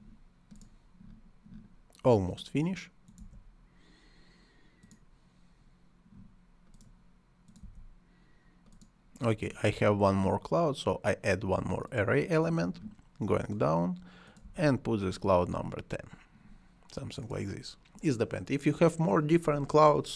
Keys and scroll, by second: 3.2 c, 7.6 c, 14.4 c.